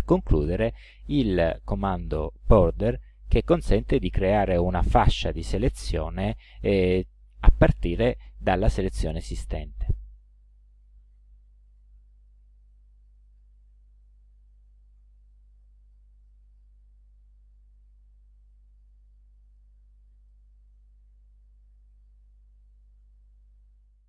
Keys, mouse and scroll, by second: 9.8 click, 11.7 KP_5, 13.2 click, 19.6 ctrl+alt+click.